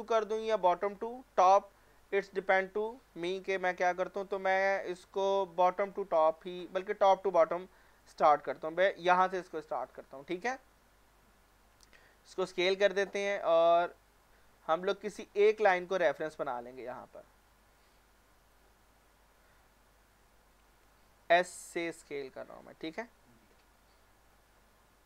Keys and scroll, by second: 12.5 s, 20.6 s.